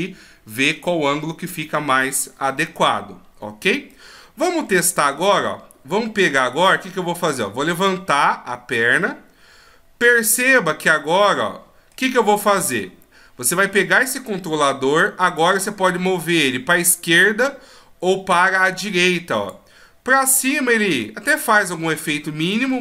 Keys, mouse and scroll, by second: 3.9 middle click, 6.3 right click, 7.9 click, 10.4 middle click, 13.1-13.6 scroll up 1, 15.4 right click, 15.4 click, 20.3 click.